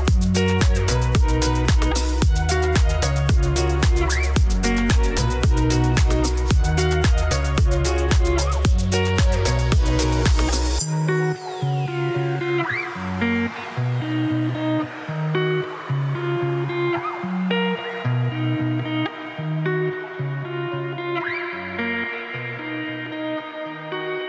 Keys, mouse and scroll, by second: 0.1-1.5 shift+middle drag, 1.5 click, 2.3 click, 3.6 click, 4.6 click, 5.4 middle click, 6.4 click, 7.2 ctrl+s, 7.4 scroll down 5, 7.7-8.9 shift+middle drag, 8.9-9.3 scroll down 1, 9.3-11.2 scroll up 1, 11.2-13.3 scroll up 1, 13.3 shift+s, 19.3 shift+middle click, 19.5 scroll up 4, 19.7 g, 20.6 middle click, 22.3 middle click, 22.5 scroll up 1, 22.8-24.0 middle drag, 24.0 scroll down 3, 24.2 middle click.